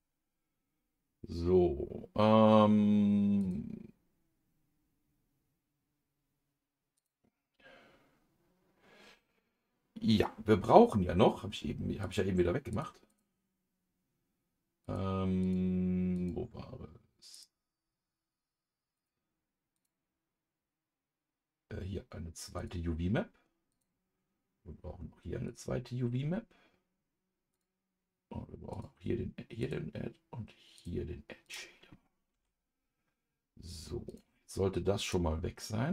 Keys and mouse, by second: 7.0-8.3 drag, 12.0 click, 12.7 click, 13.1 click, 14.8 click, 15.4 click, 16.1-19.0 drag, 19.7 click, 22.5 click, 23.7 click, 25.4 click, 27.5 click, 28.7 click, 29.6 click, 30.7 click, 31.4 click, 32.3 ctrl+s, 34.1 click, 35.1 click.